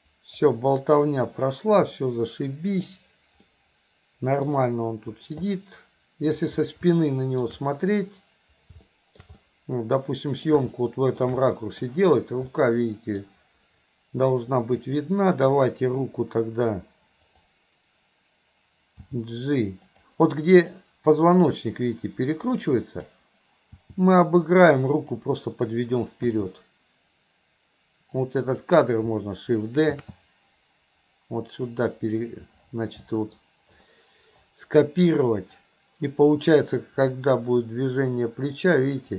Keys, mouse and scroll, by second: 2.0-2.9 middle drag, 3.5-4.5 middle drag, 5.5-6.4 middle drag, 7.0-7.5 middle drag, 8.9 middle click, 9.5-10.5 middle drag, 10.7-11.2 middle drag, 11.5 middle click, 12.6 middle click, 14.8 click, 17.4 click, 19.2 g, 20.9-23.2 drag, 23.9 g, 26.4 i, 28.2-28.7 drag, 33.1 middle click, 36.9-39.1 drag.